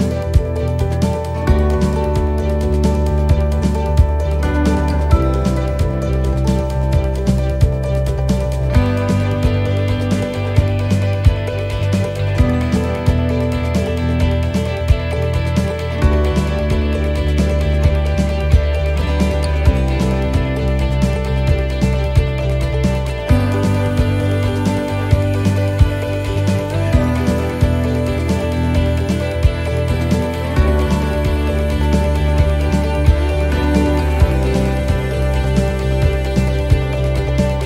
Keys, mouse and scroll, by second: 22.2 click, 22.9 middle click, 24.0-24.3 scroll down 1, 24.7 middle click, 24.7-25.3 scroll down 4, 25.5 middle click, 26.2-26.9 scroll up 3, 26.7 middle click, 29.5 click, 32.3 l, 35.4-36.3 scroll down 5, 35.9 middle click, 36.5 shift+middle click, 36.8-37.6 scroll up 4, 37.3 middle click.